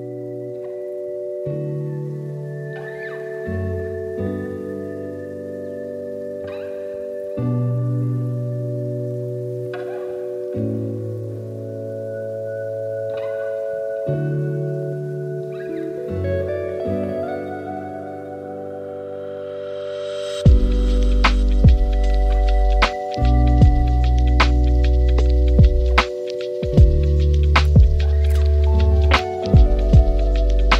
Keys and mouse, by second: 0.3 shift+middle click, 0.8 drag, 1.4 shift+d, 2.5 r, 3.9 x, 4.4 shift+a, 5.1 shift+a, 9.6 drag, 10.0 s, 11.5 g, 12.5 r, 14.1 g, 16.0-16.6 middle drag, 16.8 r, 18.0 middle click, 18.3 s, 19.6 middle click, 20.6 g, 21.5 middle click, 22.9 click, 24.6 click, 26.7 KP_0, 27.8 a, 27.9 a, 28.1 z.